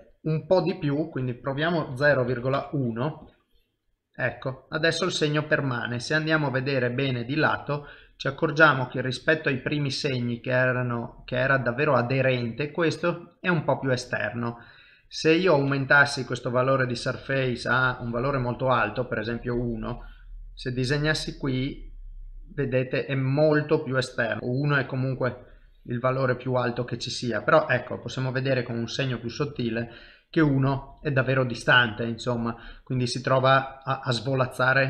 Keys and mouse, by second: 0.0 click, 3.2 click, 4.3 middle click, 6.1 ctrl+middle click, 6.6 middle click, 7.4 shift+middle click, 8.1 middle click, 8.9 ctrl+middle click, 9.6 shift+middle click, 10.2 middle click, 16.1 click, 18.2 middle click, 19.3 click, 20.6 middle click, 24.4 ctrl+middle click, 24.4 click, 25.2 click, 26.2 middle click, 28.8 middle click.